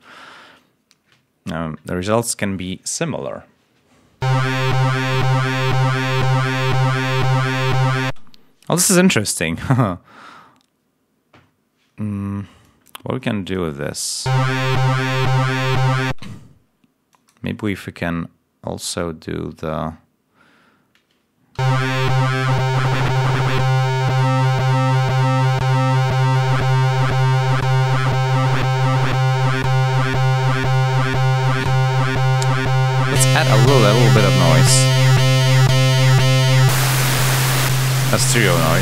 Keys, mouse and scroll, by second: 4.1 l, 8.0 space, 12.5 click, 13.1 click, 14.1 space, 14.9 space, 16.0 space, 17.0 click, 17.5 click, 21.5 l, 21.9 click, 25.9 click, 27.6 click, 28.9 click, 31.3 click, 32.3 click, 33.0 click, 33.7 click, 35.2 click, 37.4 click.